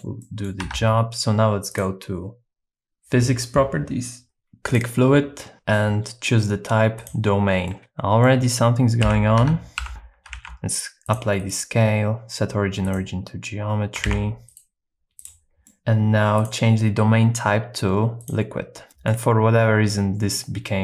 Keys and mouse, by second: 0.2 middle click, 0.6 Tab, 4.7-7.1 drag, 7.7 middle click, 9.0 KP_7, 9.4 Tab, 9.8 1, 9.9 g, 9.9 y, 10.3 ctrl+a, 11.5-13.0 right drag, 14.1 super+s, 14.5 right click, 15.6 middle click, 16.4-18.4 drag, 18.9 middle click.